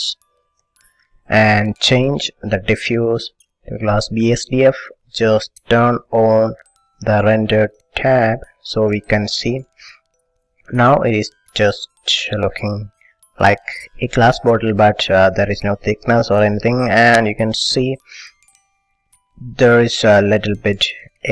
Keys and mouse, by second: 0.5 s, 2.6-4.4 drag, 6.8 click, 8.7 middle click, 18.8-20.2 middle drag.